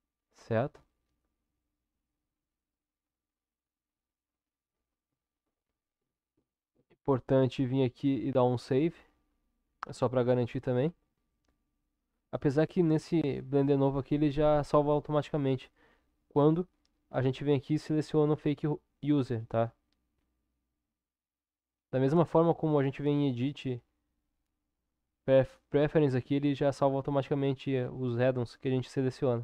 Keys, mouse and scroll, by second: 1.3 Tab, 2.8-4.8 middle drag, 5.3-29.4 drag.